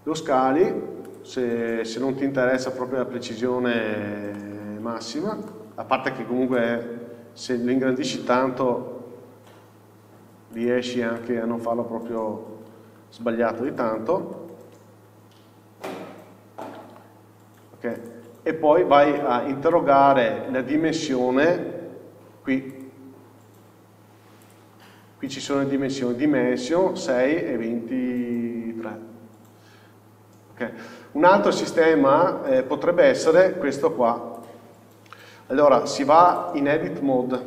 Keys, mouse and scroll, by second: 1.3 click, 1.9 s, 2.9 click, 3.0 scroll up 1, 4.5-11.5 shift+middle drag, 5.3 scroll up 1, 6.3 scroll up 1, 7.5-8.9 scroll up 1, 8.9 s, 12.1-14.4 scroll up 1, 14.4 s, 16.9-18.9 middle drag, 18.9 scroll down 2, 19.9-23.0 shift+middle drag, 23.0-31.7 drag, 31.7-32.7 scroll up 2, 32.7-34.6 scroll down 2, 34.6 x, 36.5 click.